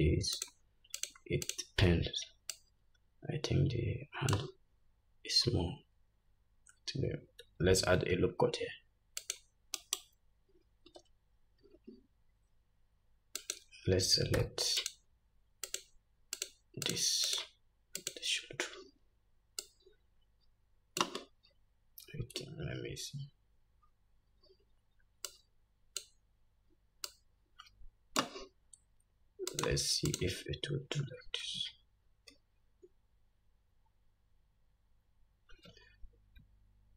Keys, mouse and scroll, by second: 0.5 shift+click, 1.1 shift+click, 1.6 shift+click, 2.7-13.7 drag, 5.3-5.6 scroll down 1, 5.6-6.1 scroll up 1, 6.6-7.2 scroll up 1, 7.2-7.6 scroll down 1, 8.1 ctrl+r, 11.0 Tab, 11.8 Tab, 14.5 3, 15.0 click, 15.8 shift+click, 16.5 shift+click, 17.0 shift+click, 17.5 shift+click, 18.2 shift+click, 19.8-29.8 drag, 24.0-25.3 scroll down 1, 25.3 scroll down 1, 30.3 shift+click.